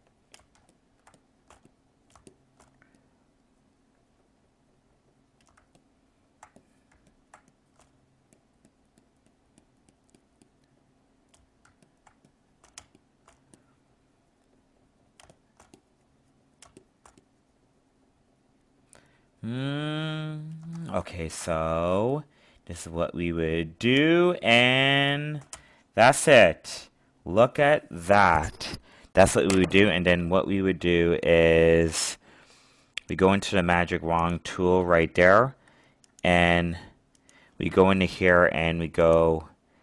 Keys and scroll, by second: 0.5 alt+space, 5.6 alt+space, 11.6 alt+space, 21.0 alt+space.